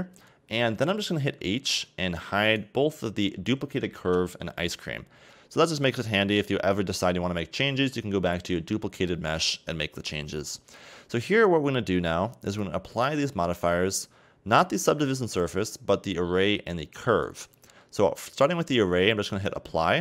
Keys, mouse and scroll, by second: 1.7 h, 2.5 right click, 4.1 h, 4.8-5.2 scroll up 3, 6.0-8.2 middle drag, 8.2-8.8 scroll down 1, 8.8 scroll down 4, 9.0-11.1 scroll up 4, 12.5 click, 15.4 click, 17.2 click, 19.3 click.